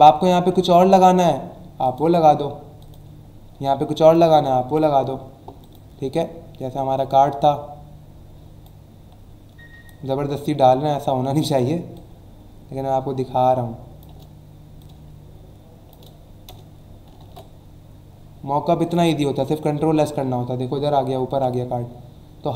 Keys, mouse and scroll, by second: 1.8 click, 2.8 click, 4.0 click, 4.6 Delete, 5.6 click, 6.7 click, 9.8 click, 11.9 shift+click, 14.8 click, 17.2 ctrl+s, 18.8 click, 19.8 alt+scroll down 1, 20.4 alt+scroll down 1, 20.8 alt+scroll up 1.